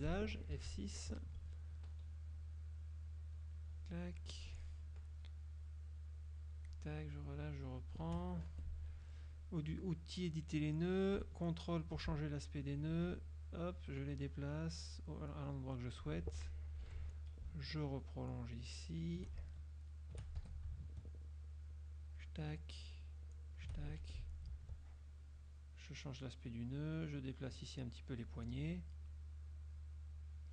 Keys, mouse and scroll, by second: 0.1 F6, 0.7 F6, 2.4-4.7 shift+drag, 5.7-7.0 shift+drag, 7.5 shift+click, 8.6 shift+F2, 11.8 ctrl+click, 12.8 ctrl+click, 13.7 ctrl+click, 14.7 click, 16.9 F6, 17.9-19.3 shift+drag, 19.6 shift+click, 20.5 shift+Escape, 21.1-22.5 shift+drag, 23.1 shift+click, 24.1 shift+F2, 24.7 ctrl+shift+click, 25.5 ctrl+click, 26.9 click, 29.2-30.5 drag.